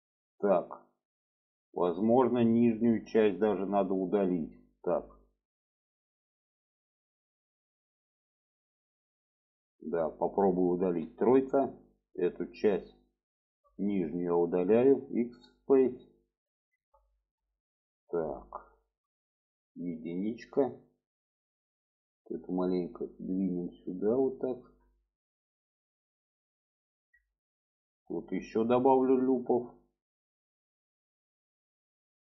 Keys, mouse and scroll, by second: 8.3-10.2 middle drag, 11.0 3, 11.6 click, 12.2 shift+click, 12.6 shift+click, 13.0 shift+click, 14.8 x, 15.9-16.7 middle drag, 17.1 shift+middle click, 17.9 shift+middle click, 18.7 shift+middle click, 20.5 click, 21.9 click, 23.1 click, 25.2 click, 25.9 click, 27.5 shift+middle click, 30.1 click, 31.6 click.